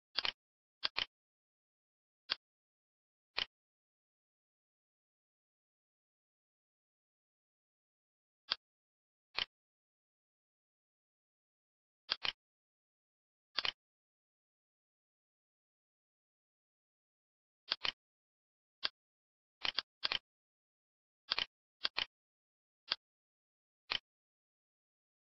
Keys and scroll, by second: 0.4 Tab.